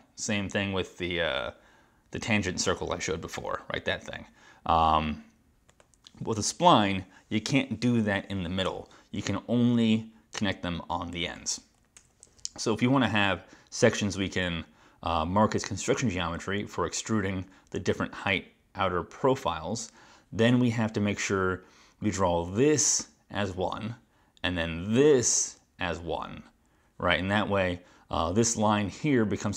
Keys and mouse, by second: 5.8 click, 8.7 BackSpace, 11.2 click, 12.0 BackSpace.